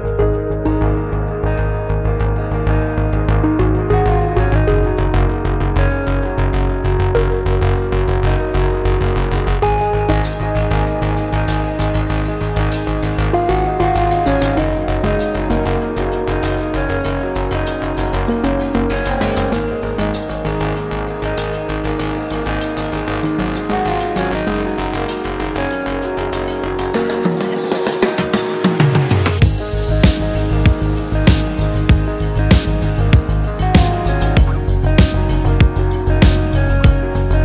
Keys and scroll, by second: 5.3 ctrl+j, 10.2 ctrl+m, 18.7 ctrl+m, 25.7 space.